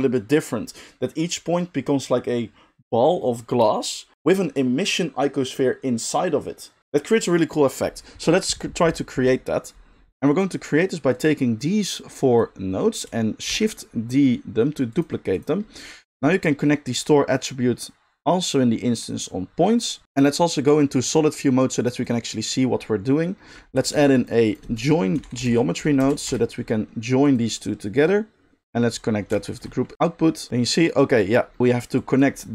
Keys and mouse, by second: 10.1-11.1 middle drag, 11.1-15.1 drag, 13.5 shift+d, 15.1 middle drag, 15.3 click, 15.4-17.1 middle drag, 17.1-20.0 drag, 20.0-21.9 middle drag, 21.9 click, 22.1-29.3 middle drag, 23.9 shift+a, 28.0-29.6 drag, 29.6-31.9 alt+shift+middle drag, 31.9-32.5 drag.